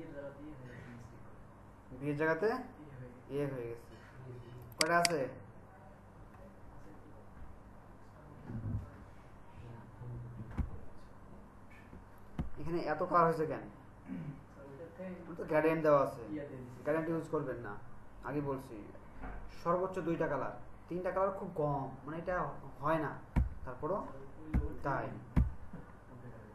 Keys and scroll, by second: 10.7 Left, 12.3 Right, 23.5 Left, 24.5 Left.